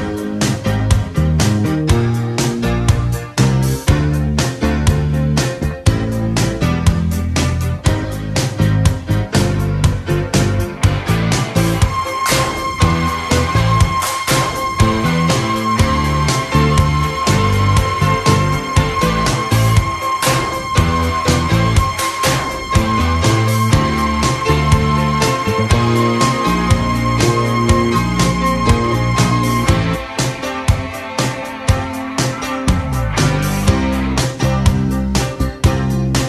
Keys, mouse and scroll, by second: 4.0 shift+a, 8.3 KP_3, 9.3 g, 17.5-19.8 drag, 19.8 ctrl+z, 20.3 KP_3, 25.7 Tab, 27.4 s, 29.4 s, 32.6 s.